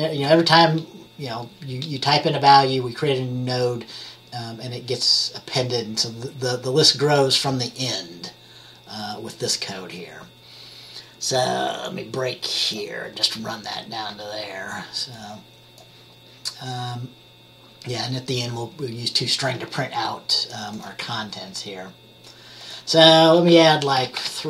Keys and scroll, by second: 24.1 3, 24.3 Return.